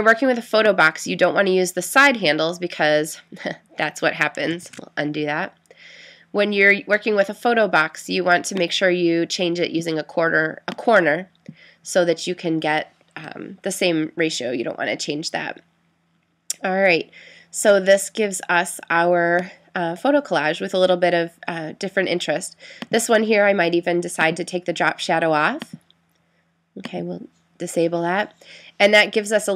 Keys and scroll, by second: 4.6 super+z.